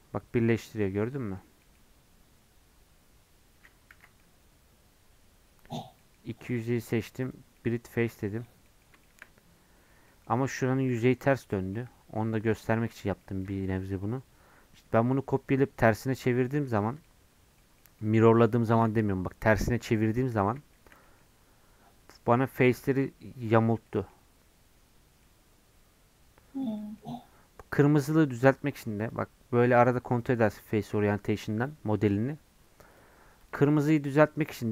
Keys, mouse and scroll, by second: 3.9 ctrl+z, 4.2-6.5 middle drag, 6.5-7.5 right drag, 7.5-10.6 middle drag, 10.6 a, 11.5 middle click, 11.8 Tab, 12.2-12.5 scroll down 3, 12.5 middle click, 12.8 click, 13.2 middle click, 14.1-16.5 scroll up 1, 16.5-20.0 shift+middle drag, 20.0 scroll up 2, 20.3-22.5 middle drag, 22.5-23.8 drag, 23.8-29.0 middle drag, 29.0-32.9 drag.